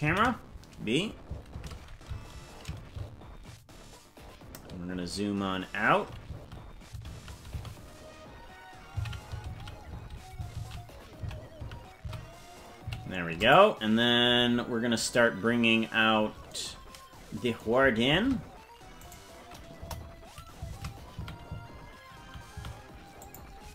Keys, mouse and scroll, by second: 0.0 ctrl+b, 1.5 shift+`, 18.0 shift+`, 19.7 KP_0, 20.6 shift+`.